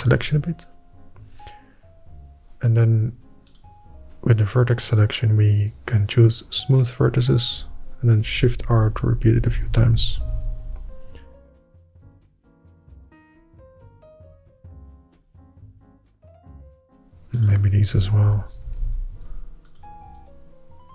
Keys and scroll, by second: 0.1 ctrl+KP_Add, 0.1 ctrl++, 9.0-11.3 typing, 12.3 Tab, 13.0 Tab, 19.0 shift+r, 19.5 shift+r.